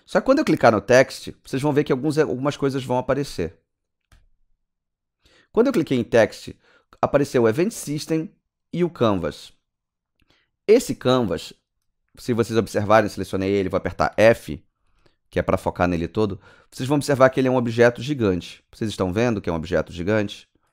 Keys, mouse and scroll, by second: 4.1 click, 5.8 click, 10.3 click, 11.8-12.5 scroll down 5, 12.5 scroll up 2, 14.1 f, 15.0 alt+click, 15.5 right click, 16.0 click, 17.2 right click, 17.8 click, 18.7 middle click, 19.2 click, 20.2 alt+right click.